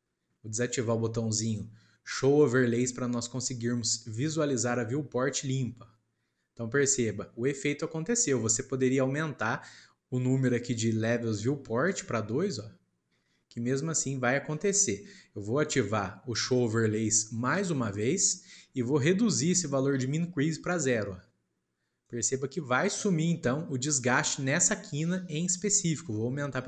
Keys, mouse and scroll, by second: 5.4 click, 11.8-14.9 drag, 17.8 click, 20.5-23.0 drag.